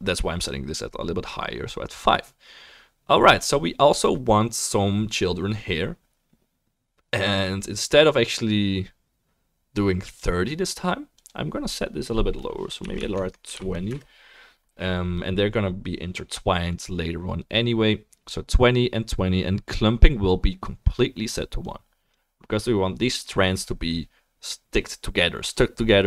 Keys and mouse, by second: 10.2-26.0 right drag, 11.1-26.0 drag.